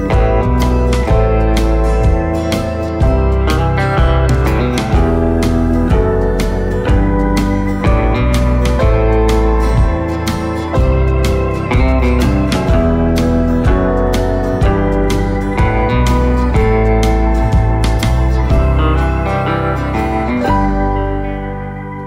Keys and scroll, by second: 6.2 v, 11.8 v.